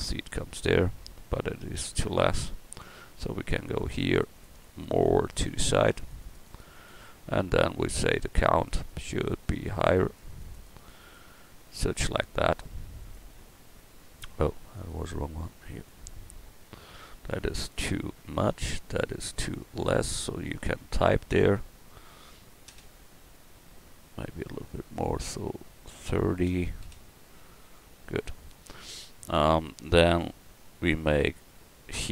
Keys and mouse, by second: 18.5-32.1 drag.